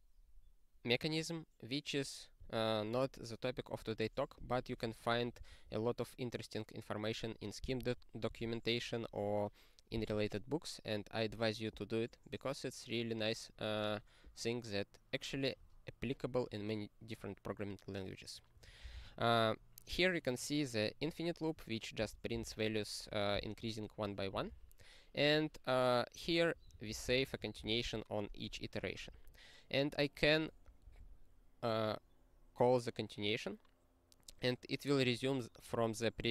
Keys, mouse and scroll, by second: 19.1 ctrl+e, 22.3 ctrl+b, 24.3 ctrl+n, 24.5 ctrl+n, 26.4 click, 26.5 click, 26.7 ctrl+a, 26.9 ctrl+space, 27.0 ctrl+e, 27.6 ctrl+g, 29.0-29.8 ctrl+n, 30.8 ctrl+p.